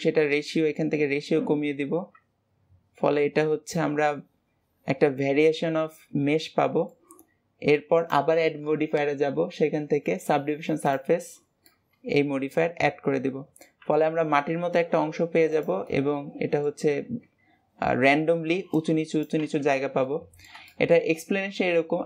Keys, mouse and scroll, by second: 4.0-7.0 middle drag, 7.9-11.0 drag, 11.6-13.8 middle drag, 13.8 g, 15.8-17.2 middle drag, 17.2 Tab, 17.8 Tab, 20.0-22.0 middle drag.